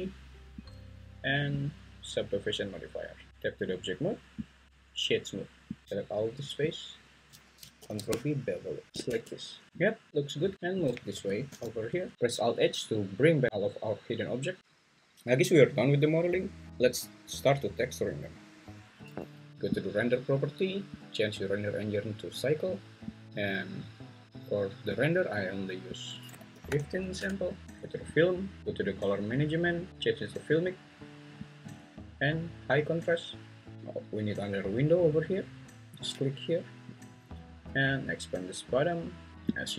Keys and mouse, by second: 0.6 click, 1.7-3.3 drag, 3.3 Tab, 4.6 right click, 5.8 2, 6.7 alt+click, 7.8 ctrl+b, 9.1 Tab, 10.1 `, 10.6 `, 10.8 click, 11.1 g, 11.5 x, 12.1 alt+h, 21.0-23.3 drag, 26.0-27.2 drag, 28.1 click, 29.2 click, 29.9-30.6 drag, 31.6-32.8 drag, 34.0-37.0 drag.